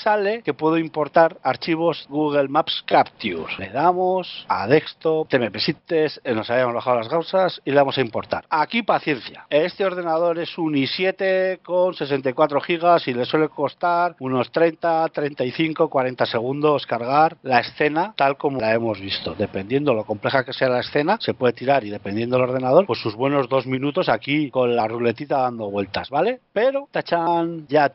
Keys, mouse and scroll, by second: 27.4 scroll up 2.